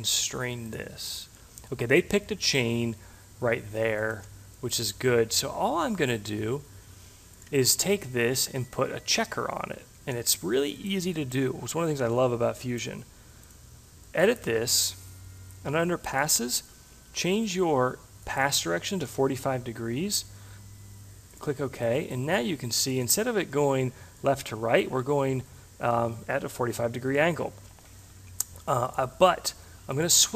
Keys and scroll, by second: 18.6 5.